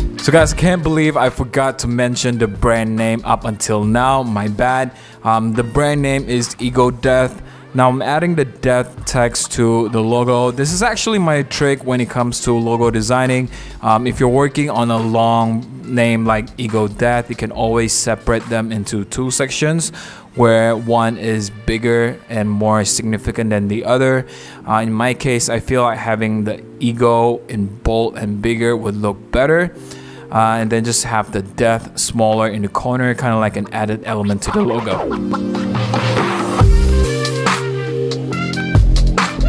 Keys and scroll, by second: 4.3-4.9 typing, 12.2 v, 18.0 p, 20.1 typing, 31.9-32.7 typing, 34.4 v, 35.5 alt+Left, 35.5 Right, 35.7 Right, 36.1 Left, 36.2 Right, 37.2 v.